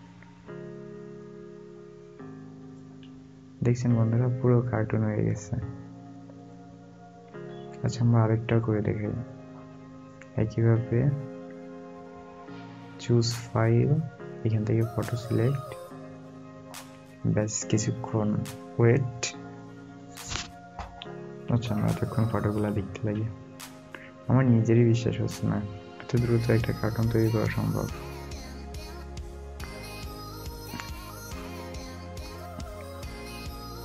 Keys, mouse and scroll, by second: 1.3 alt+scroll, 1.4 alt+scroll down 1, 2.9 alt+scroll, 2.9 alt+scroll up 1, 4.1-5.1 alt+scroll down 1, 8.2-9.8 alt+scroll, 9.8 scroll up 1, 14.7 scroll up 1, 14.8 double click, 23.3 click, 23.5 alt+scroll up 1, 24.9 alt+scroll down 1, 27.2 alt+scroll up 1, 28.6-29.0 alt+scroll up 1, 29.7 alt+scroll.